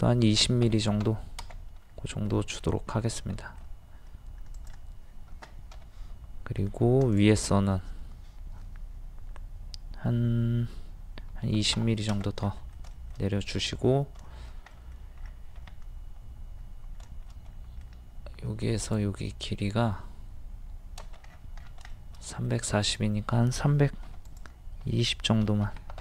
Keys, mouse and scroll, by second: 0.6 KP_2, 0.7 KP_0, 1.9 scroll up 1, 2.4 middle click, 2.9 scroll up 1, 3.4 shift+middle click, 4.6 click, 5.7 m, 7.0 click, 11.3 KP_2, 11.4 KP_0, 12.6 middle click, 12.9 shift+middle click, 14.3 shift+middle click, 15.6 scroll up 1, 17.5 middle click, 18.8 click, 21.3 scroll down 1, 22.0 shift+middle click, 22.8 click, 24.1 d, 24.3-25.3 drag, 25.4 KP_3.